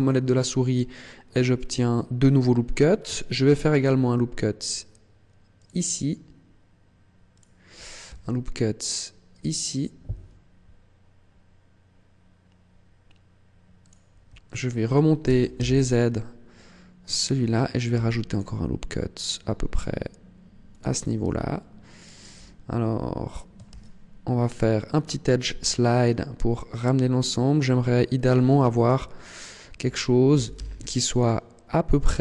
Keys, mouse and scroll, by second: 3.3 ctrl+r, 7.2 click, 7.9 ctrl+r, 13.7 click, 14.3 alt+right click, 15.1 g, 17.1 click, 17.7 ctrl+r, 21.1 click, 21.7 alt+right click, 23.5 ctrl+e, 29.1 click, 29.1 alt+right click, 30.2 g, 31.1 click.